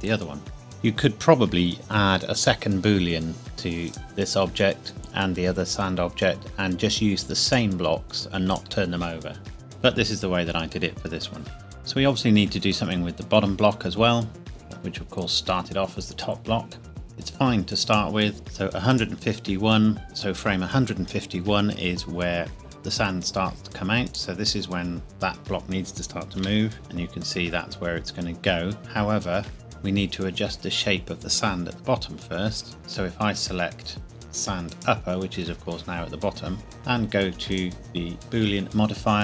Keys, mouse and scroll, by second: 3.8 click, 7.4 click, 12.9 click, 16.9 click, 18.9 click, 24.1 click, 26.6 g, 26.7 z, 29.5 Escape, 34.7 click, 37.5 click.